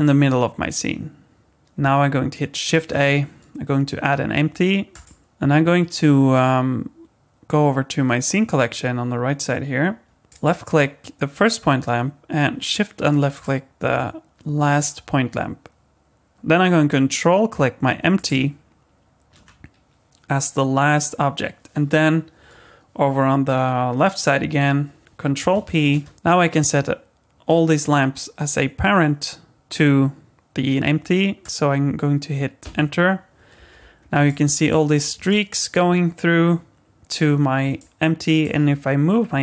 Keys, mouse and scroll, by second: 2.7 shift+a, 5.2 middle click, 10.3 click, 13.3 shift+click, 18.2 ctrl+click, 25.8 ctrl+p, 34.0 scroll down 1, 34.3 middle click, 34.9-35.3 scroll up 2, 35.3 middle click, 37.8 middle click.